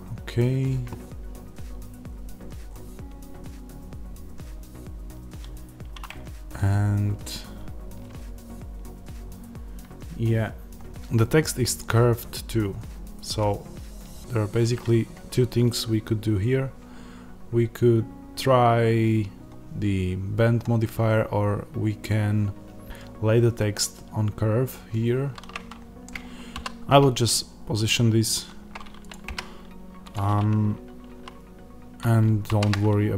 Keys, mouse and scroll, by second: 1.8-3.9 scroll down 1, 3.9-6.0 scroll down 1, 6.0 Tab, 14.6 Tab, 26.1 click, 26.5 s, 29.0 click, 29.2 g, 30.0 click.